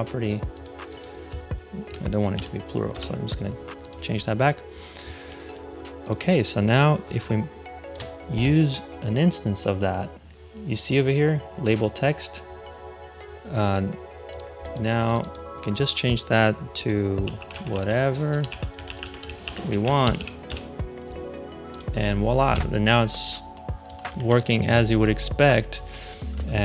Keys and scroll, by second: 2.2 BackSpace, 2.8 Return, 16.9-20.6 typing, 24.1 super+z.